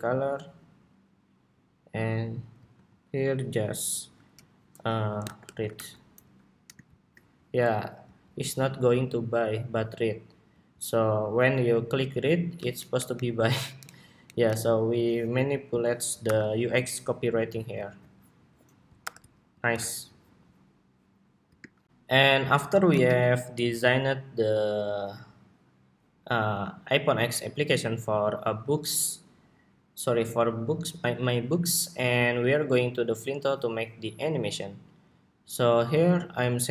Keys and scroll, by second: 2.4 super+a, 5.9 Escape, 15.9 super+-, 17.7 super+s, 18.7 super+-, 19.4 super+=, 21.5 shift+super+2, 22.7 super+-.